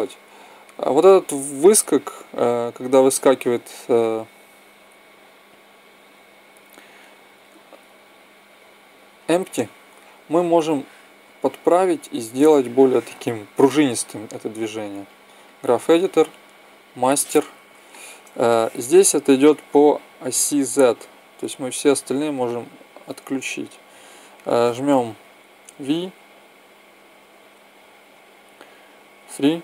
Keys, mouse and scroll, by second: 0.9-3.1 middle drag, 8.4-10.3 right drag, 10.5 click, 12.8 click, 19.9-22.2 drag, 22.2-23.3 middle drag, 24.1-25.3 middle drag, 25.9 v.